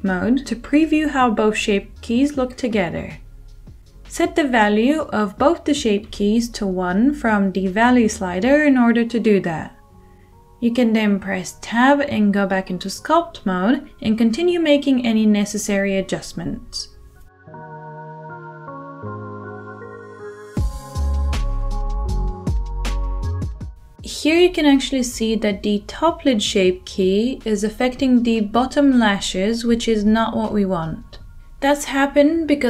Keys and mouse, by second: 0.9-8.0 drag, 8.0-8.6 middle drag, 8.6-13.6 drag, 13.6-16.5 middle drag, 14.0 Tab, 14.4 g, 15.7 g, 16.5 click, 16.6-17.8 middle drag, 16.9 g, 17.8 g, 17.8 click, 18.3-22.6 middle drag, 20.2 click, 21.0 g, 21.4 click, 22.1 g, 22.4-25.6 shift+drag, 23.0 r, 23.4 middle click, 24.9 Tab, 25.6-27.3 middle drag, 27.3 click, 27.4-28.2 middle drag, 28.2-32.6 drag.